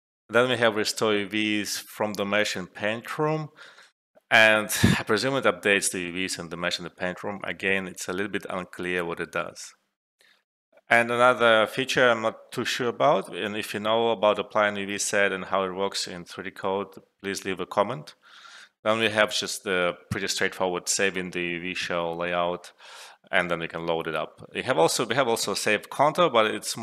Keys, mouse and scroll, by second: 9.8 alt+Num_Lock, 12.5 typing.